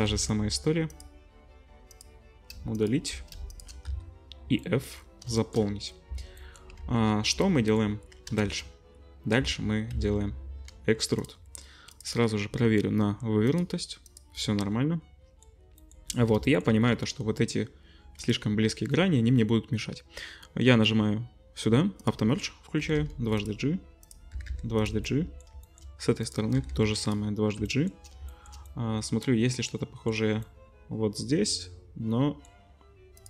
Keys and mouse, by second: 0.1 x, 2.7 alt+shift+click, 3.5 alt+shift+click, 3.8 f, 4.6 middle click, 5.0 shift+click, 5.4 shift+click, 5.8-6.5 middle drag, 6.1 Tab, 6.8 ctrl+s, 9.4 Tab, 9.9 a, 10.7 e, 12.0-16.8 drag, 18.0 2, 22.0 click, 22.8 g, 24.3 g, 25.3 middle click, 25.7 shift+middle click, 26.2 click, 26.6 g, 27.8 shift+middle click, 28.3 shift+middle click, 30.4 middle click, 30.9 middle click, 31.0 middle click, 31.6-33.2 drag.